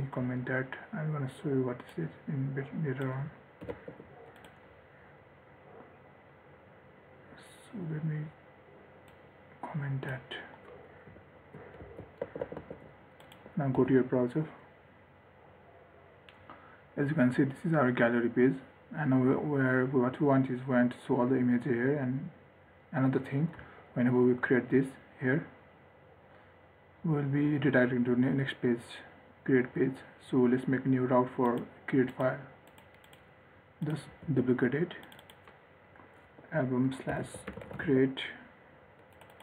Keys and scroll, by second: 4.0 ctrl+s, 12.1 ctrl+x, 12.4 ctrl+s, 14.1 ctrl+r, 34.5 ctrl+d.